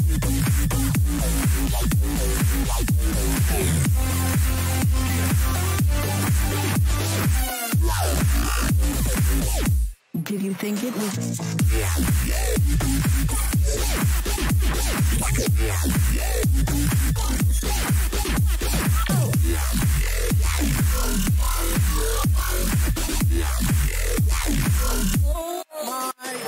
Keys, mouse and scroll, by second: 7.3-14.2 middle drag, 16.5-19.3 middle drag, 21.5 a, 21.8 a, 23.8 k.